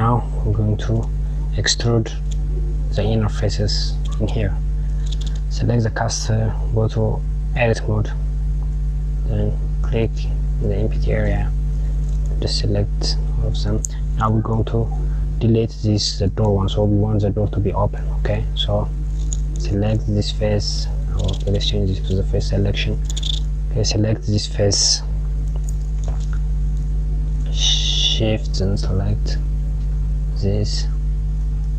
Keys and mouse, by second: 4.3 click, 5.1 click, 7.0 Tab, 9.5 click, 10.3 KP_Add, 11.7 click, 18.7 click, 21.9 click, 23.2 click, 26.4 click, 28.0 shift+click, 30.3 shift+click.